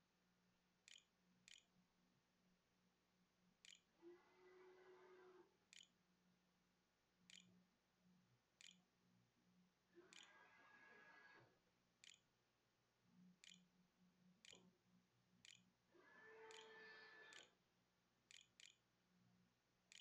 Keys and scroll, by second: 0.0-10.1 typing, 11.4 Tab, 12.0-13.2 typing, 14.8 shift+Return, 15.0-20.0 typing.